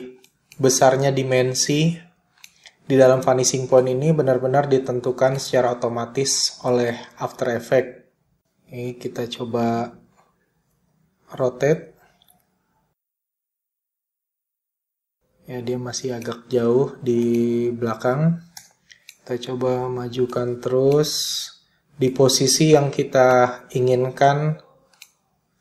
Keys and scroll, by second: 8.5 s, 9.3 r, 17.7 p.